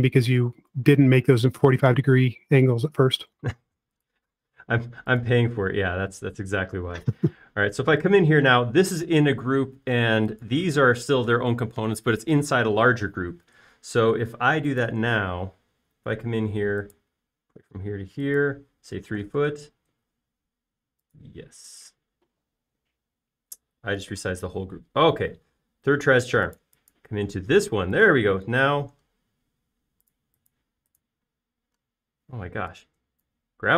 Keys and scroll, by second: 0.2 super+a, 20.0-20.7 typing, 25.2 super+z, 26.2 space.